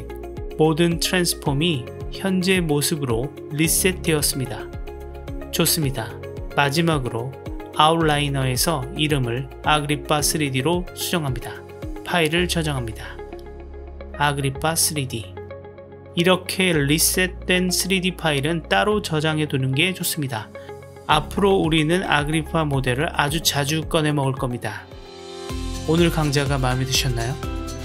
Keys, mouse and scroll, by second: 6.5 click, 8.9 click, 9.0-11.0 drag, 9.3 BackSpace, 10.1 p, 12.2-12.9 drag, 24.6-27.8 middle drag.